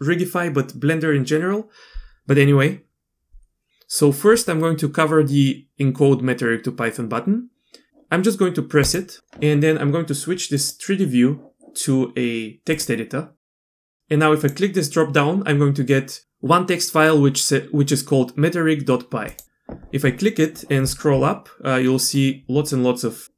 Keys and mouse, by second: 8.9 click, 10.6-12.8 drag, 13.6 click, 14.4-19.3 drag, 22.2-23.3 drag.